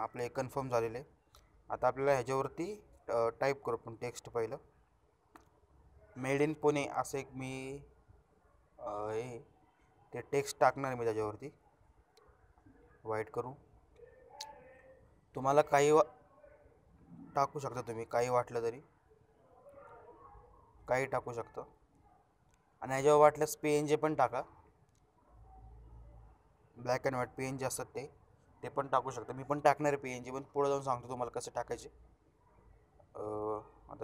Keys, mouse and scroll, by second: 2.8 click, 8.3 click, 11.0-12.4 drag, 19.5 click, 25.8 click, 27.4-28.4 scroll down 1, 28.4 click, 29.1-31.2 scroll up 1, 31.2 click, 32.5 scroll down 1, 33.2 click.